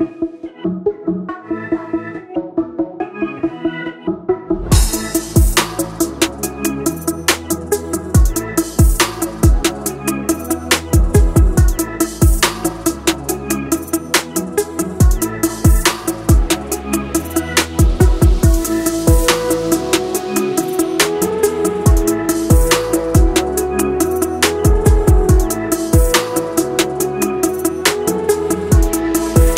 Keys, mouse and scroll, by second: 22.0 click, 26.1-29.5 drag.